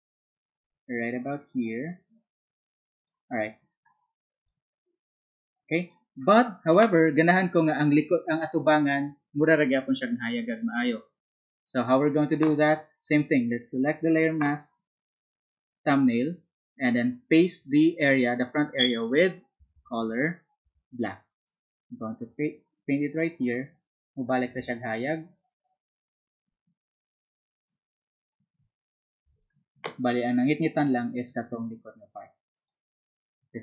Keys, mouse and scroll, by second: 32.9 z.